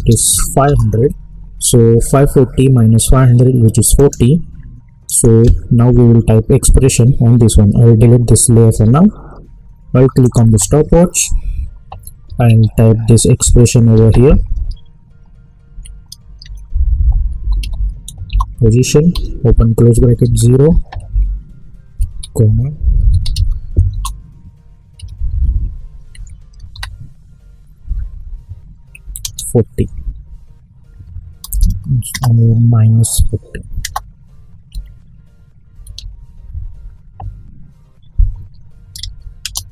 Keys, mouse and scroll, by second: 0.6 Return, 3.9 click, 10.2 alt+click, 12.2 typing, 13.4 Left, 13.9 typing, 15.7 Right, 17.1-19.1 typing, 18.2 Return, 20.2 0, 21.1 Right, 22.1-26.7 typing, 23.9 Return, 26.1 Right, 38.9 ctrl+a.